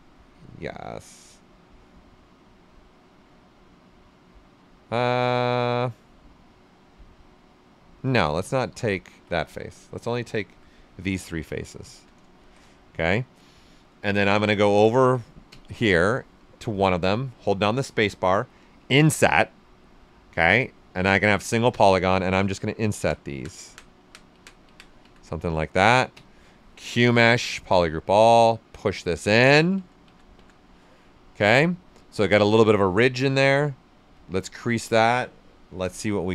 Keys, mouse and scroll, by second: 6.5 right click, 8.2 ctrl+z, 9.3 right click, 10.3 alt+click, 10.7 right click, 12.3 shift+d, 12.6-14.3 right drag, 14.3 right click, 15.4 space, 22.3-26.1 drag, 26.1 space, 26.9 space, 28.2-31.0 drag, 31.0 right click, 31.3 alt+right click, 34.1 click, 35.7 d.